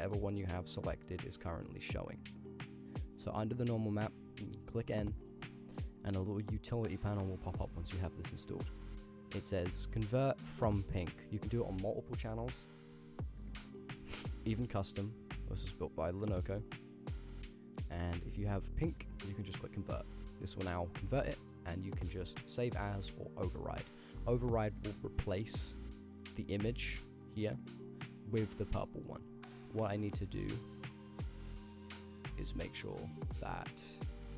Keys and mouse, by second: 0.0 middle click, 0.6 drag, 0.9 middle click, 1.7 click, 2.1 middle click, 2.5 click, 2.8 middle click, 4.9 m, 5.2 n, 10.8-15.3 drag, 17.2-18.4 drag, 19.6 click, 23.1 click, 24.4 middle click, 24.9 click, 25.1 h, 26.0 click, 26.5-27.7 drag, 27.9 middle click, 28.9 middle click, 29.6 middle click, 30.0 ctrl+click, 30.5 middle click, 31.1-31.6 drag, 31.9 middle click, 33.9 click.